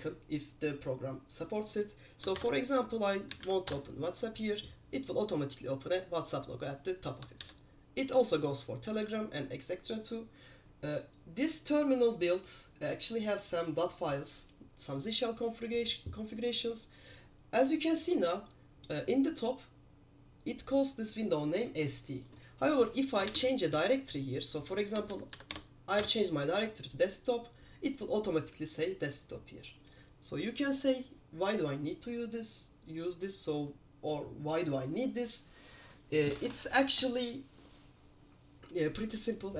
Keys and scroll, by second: 2.6 super+Return, 3.4-3.8 typing, 3.8 Return, 7.5 super+q, 23.6-25.9 typing, 26.1 Return.